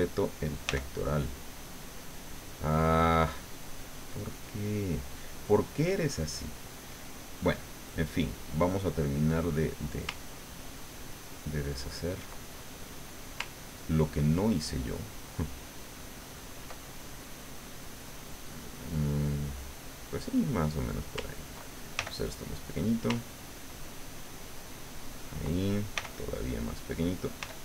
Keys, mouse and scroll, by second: 0.6 f, 2.0 click, 5.9-7.4 drag, 8.0-9.4 drag, 10.1-12.4 ctrl+drag, 12.7 ctrl+middle click, 13.6-16.8 ctrl+drag, 16.8 ctrl+middle click, 17.2 click, 17.9 middle click, 19.0-20.8 middle drag, 21.9 ctrl+f, 22.7 click, 23.3-24.9 ctrl+drag, 25.9 f, 26.4 click, 27.4 f.